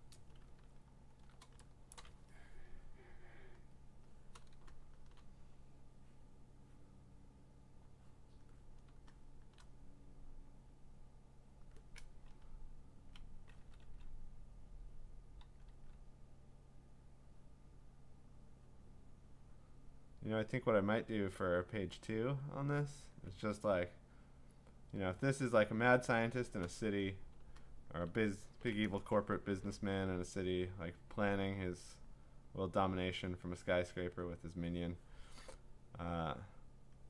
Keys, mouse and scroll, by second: 0.8 scroll up 6, 1.1 scroll, 1.9 click, 4.1 click, 5.0-5.3 click, 5.3 -, 8.4 click, 8.9 -, 9.4 click, 9.5 click, 9.7 click, 11.6 click, 12.4-13.1 ], 13.6 [, 13.8 [, 15.0 click, 15.4 [, 15.7 [, 22.1 click, 22.6 click, 22.8 [, 23.1 [, 26.1 click, 27.3 [, 29.5 [, 29.7 [, 30.8 click, 32.2 click, 33.3 click, 34.2 click, 36.9 click.